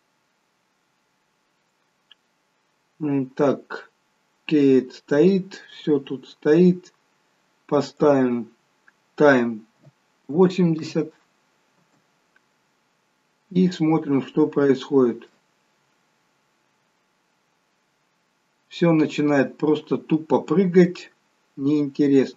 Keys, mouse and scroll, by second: 0.5-1.0 scroll down 1, 4.6 scroll down 2, 7.9 click, 7.9-9.1 scroll down 5, 11.7 space, 13.3 scroll up 1, 13.8 middle click.